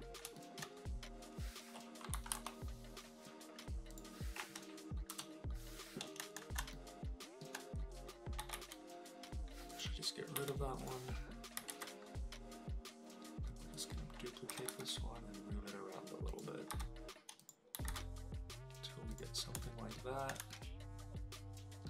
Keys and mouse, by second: 0.3 shift+middle click, 2.1 KP_7, 3.0 KP_Decimal, 3.9 middle click, 5.1 KP_0, 6.2 shift+middle click, 6.7-7.4 shift+middle drag, 8.4 g, 8.5 z, 9.7 click, 10.4 Delete, 10.8 click, 11.7 alt+d, 14.5 g, 14.7 y, 16.3 click, 16.7 g, 17.4 click, 17.9 alt+d, 19.1 click, 19.7 shift+middle click, 20.5-21.8 shift+middle drag.